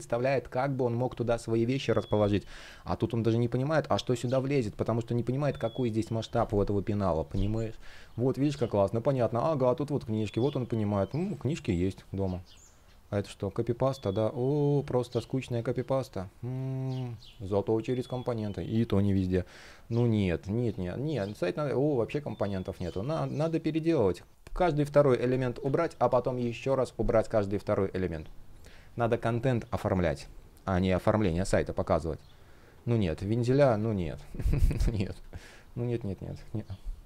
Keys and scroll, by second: 8.8 super+z, 16.0 shift+o, 22.5 space, 24.0 shift+o, 34.0 super+z.